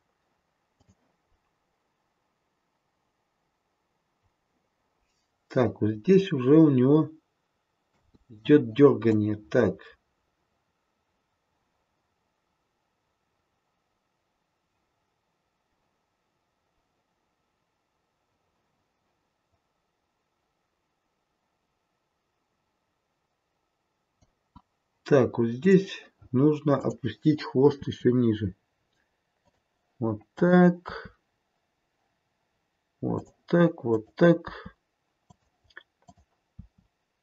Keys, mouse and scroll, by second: 0.7 click, 8.0 space, 9.2 click, 25.6 click, 26.7 click, 27.8 r, 30.3 click, 33.3 r, 33.8 click, 34.4 r, 35.9 click, 36.6 r.